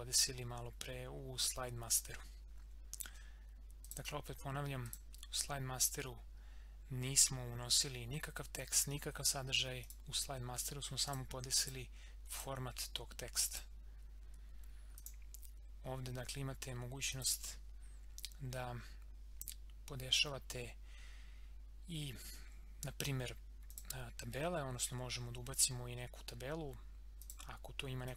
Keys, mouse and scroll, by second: 3.8 click, 5.8 scroll up 1, 9.8 click, 15.6 scroll down 1, 17.1 click, 23.7 click, 25.4 scroll up 1, 26.5 scroll down 1, 27.2-28.1 drag.